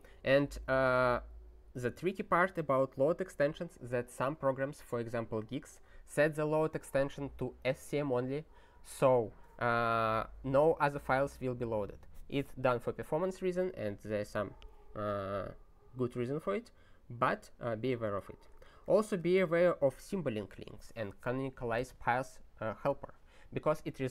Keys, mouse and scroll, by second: 2.9 click, 18.3 ctrl+p, 18.5 ctrl+a, 18.7 ctrl+space, 18.8 ctrl+e, 19.4 ctrl+g.